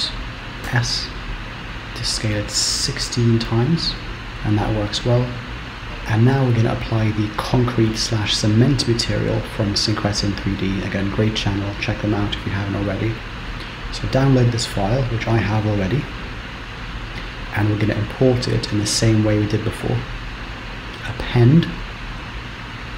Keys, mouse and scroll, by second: 1.1 s, 4.8-5.8 scroll up 2, 20.7 click.